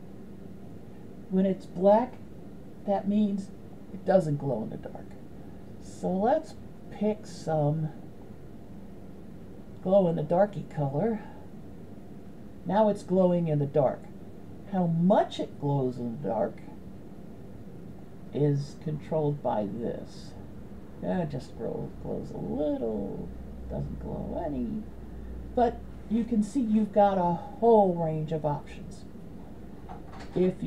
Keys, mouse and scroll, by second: 3.7 click, 18.1-25.5 drag, 28.6 middle click.